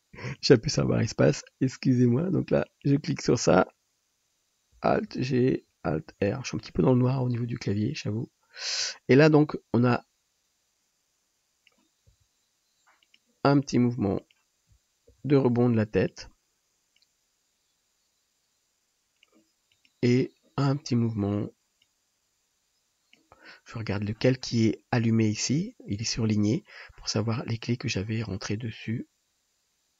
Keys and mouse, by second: 0.4-2.9 middle drag, 0.4-2.9 right drag, 5.1 alt+g, 6.2 alt+r, 9.4-14.3 middle drag, 9.4-14.3 right drag, 12.2 r, 15.1 shift+d, 19.9-21.9 drag.